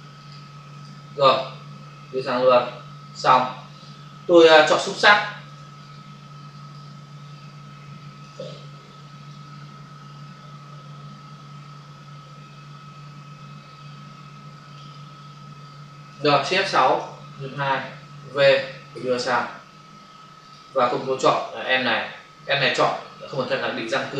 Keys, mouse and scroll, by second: 0.2 click, 0.2 click, 0.7 click, 0.8 click, 1.3 click, 3.2 click, 4.4 ctrl+d, 4.7 ctrl+space, 5.4 space, 7.2 ctrl+click, 8.7 w, 9.3 click, 14.8 click, 16.7 shift+F6, 17.3 Return, 18.1 v, 18.5 click, 20.3 click, 20.5 click, 20.8 space, 20.9 click, 21.0 space.